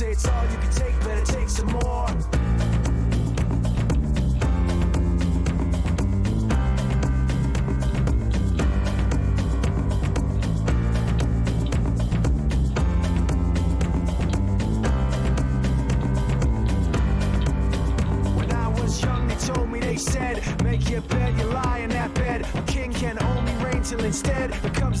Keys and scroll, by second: 7.0 e, 9.3-11.3 typing.